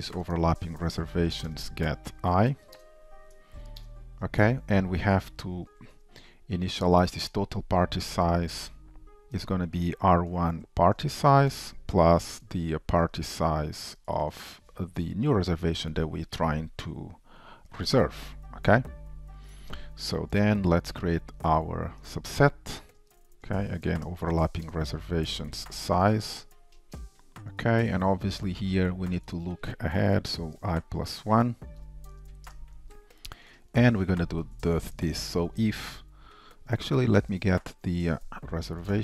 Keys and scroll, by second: 0.4 Return, 2.8 shift+super+Return, 7.3 Return, 11.6 Return, 13.9 Return, 22.1 Return, 27.4 Return, 32.6 shift+Return.